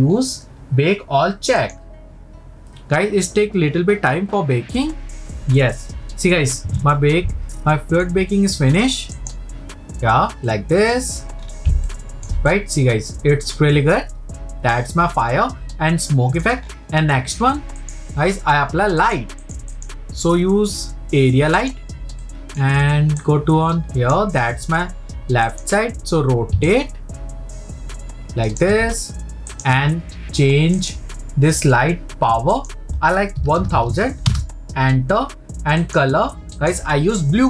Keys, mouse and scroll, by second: 1.6-5.2 drag, 6.7-7.5 scroll up 2, 7.5-9.3 shift+middle drag, 9.3-10.5 drag, 10.5-11.4 middle drag, 11.4-11.8 scroll up 3, 11.9-15.5 shift+middle drag, 16.6-17.7 scroll down 2, 17.7 scroll down 2, 17.8-19.5 drag, 19.7-21.7 drag, 25.5-26.8 drag, 28.6 ctrl+click, 29.5-30.9 drag, 32.5-33.8 drag, 33.8 KP_0, 35.8 click.